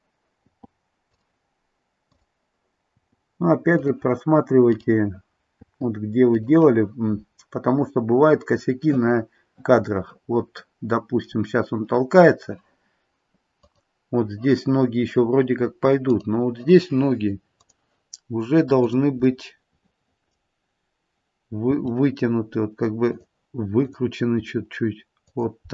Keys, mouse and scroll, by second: 0.4 i, 2.1 click, 2.9 i, 4.7 click, 5.5 i, 7.1-7.8 scroll up 1, 7.8-8.7 scroll down 1, 8.7 scroll down 1, 8.8 middle click, 9.6 middle click, 10.2 middle click, 13.6 click, 16.1 click, 20.1 click, 20.1 middle click, 21.7 r, 23.8 click, 24.4 r.